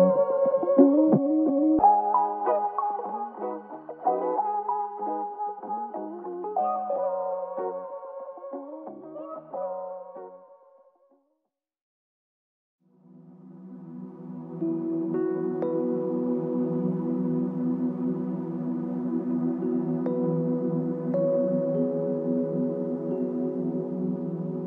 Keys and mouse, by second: 6.0 double click, 11.2 f, 11.3 shift+click, 13.1 shift+click, 14.1 alt+click, 18.8 f, 20.8 typing.